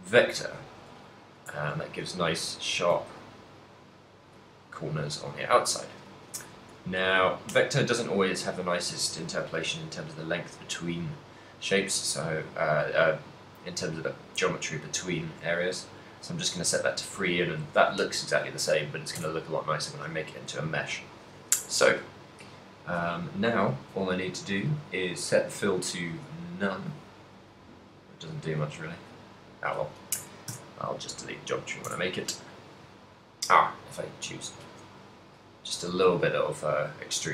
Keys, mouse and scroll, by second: 1.6 Tab, 2.0 z, 2.4 middle click, 3.1 shift+middle click, 4.4 shift+middle click, 5.1 KP_7, 5.6 KP_Decimal, 6.4 Tab, 7.5 v, 15.4 v, 19.4 Tab, 24.8 click, 27.6 click, 28.6 click, 29.1 click, 30.6 Tab, 31.9 Tab, 34.1 click, 34.8 middle click, 35.7 KP_1.